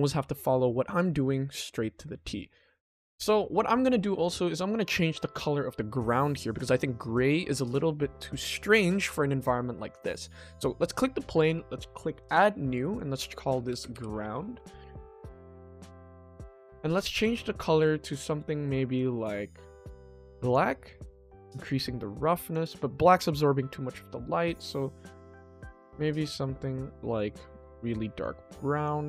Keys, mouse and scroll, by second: 4.2 click, 6.3 click, 9.9 click, 12.2 click, 12.9-14.5 drag, 16.2-16.7 scroll up 1, 16.7-18.2 ctrl+middle drag, 18.3 middle click, 18.9 click, 21.7 click, 23.2 click.